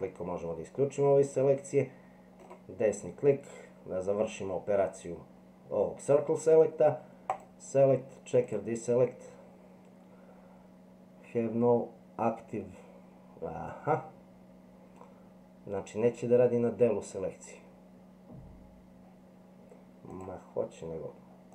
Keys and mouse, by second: 7.3-16.0 drag, 20.2 click.